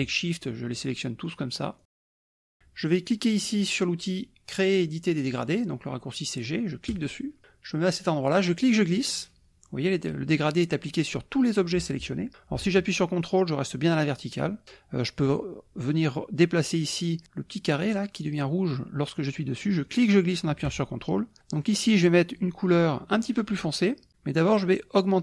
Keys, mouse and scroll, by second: 0.1 shift+click, 0.8 shift+click, 1.3 shift+click, 1.9 shift+click, 6.9 click, 8.5-14.7 drag, 19.9-21.4 drag, 21.7 click.